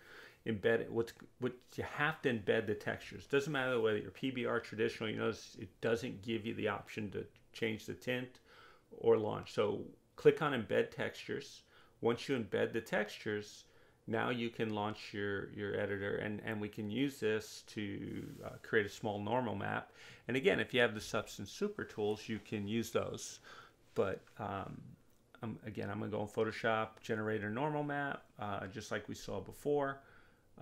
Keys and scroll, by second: 15.6 space, 18.3 ctrl+=.